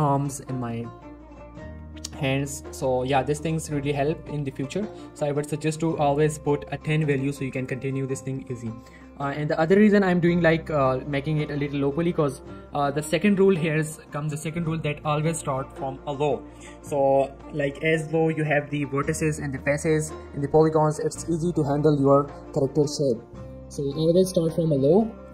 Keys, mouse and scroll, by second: 2.5 middle click, 2.7 z, 3.0 shift+middle click, 3.2 Tab, 3.5 middle click, 3.7 Tab, 4.0 middle click, 5.1 Tab, 5.3 middle click, 7.1 scroll up 1, 7.3 g, 7.5 right click, 7.7 middle click, 8.6-9.1 scroll down 1, 9.1-10.2 scroll up 1, 10.2 s, 10.7 right click, 13.8 click, 18.0 middle click, 18.6 shift+middle click, 24.9 middle click.